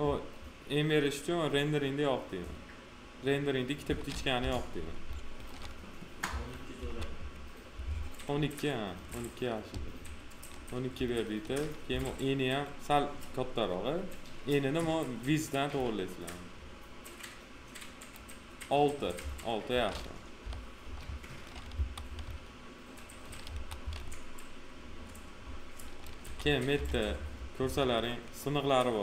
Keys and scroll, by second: 4.3 p, 6.2 F4, 11.9 f, 20.3 p, 21.6 F4, 23.4 F4, 26.1 f, 27.5 F4.